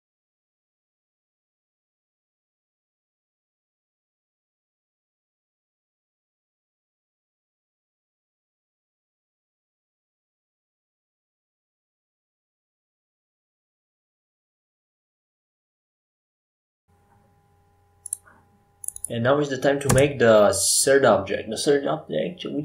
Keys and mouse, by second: 0.0-2.9 drag, 1.8 s, 5.5-8.9 drag, 8.9-10.3 middle drag, 10.3-13.4 drag, 14.7 KP_5, 15.1 KP_1, 16.9 KP_7, 20.6 shift+a.